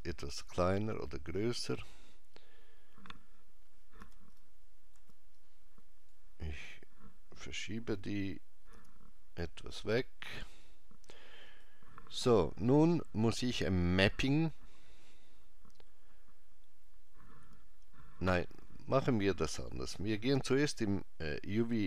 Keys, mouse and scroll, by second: 0.0 click, 4.0 b, 8.7 g, 11.5 click, 20.0 click.